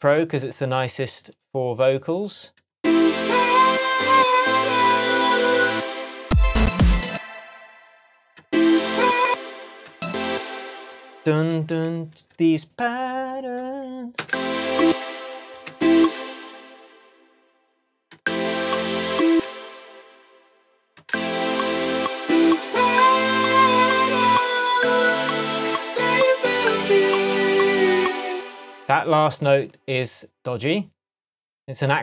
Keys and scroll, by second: 2.7 space, 5.7 space, 7.0 space, 8.4 space, 9.1 space, 9.6 space, 11.6 k, 14.2 space, 16.9 space, 18.1 space, 19.3 space, 20.1 space, 21.0 space, 28.3 space.